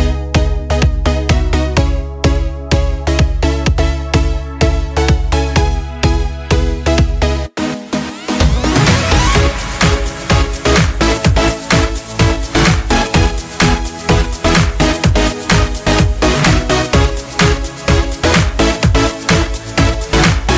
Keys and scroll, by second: 11.3-12.4 typing, 13.9 Return, 15.4 Return, 15.5 Return, 19.9 ctrl+z.